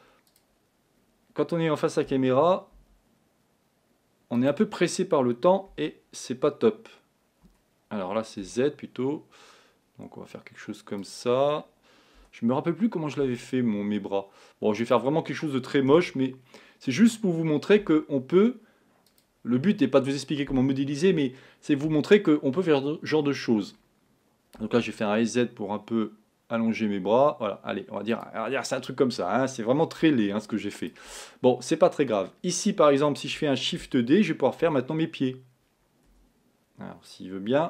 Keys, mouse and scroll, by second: 2.2 s, 5.7 s, 12.2 g, 16.0 s, 24.7 s, 30.1 z, 33.8 shift+d.